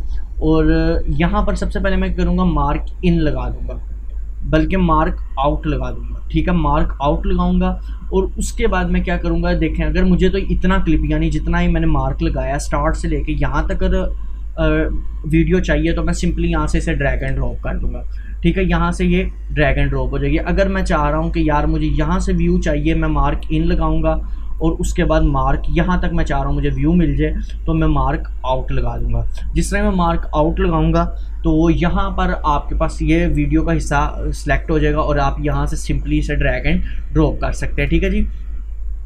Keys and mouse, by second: 5.7 click, 9.5-13.8 drag, 16.4-31.2 drag, 33.3-39.0 drag.